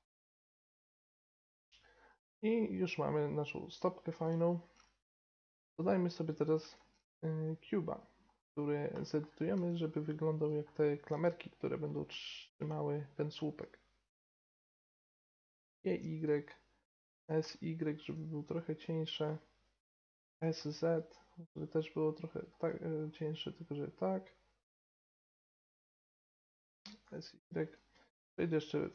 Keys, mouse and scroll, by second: 5.1-6.7 middle drag, 6.7 shift+a, 9.5 s, 11.0 s, 12.8-13.3 middle drag, 14.7 g, 17.1 s, 19.4 middle click, 19.5 middle click, 20.2 s, 26.7 s, 28.4 click.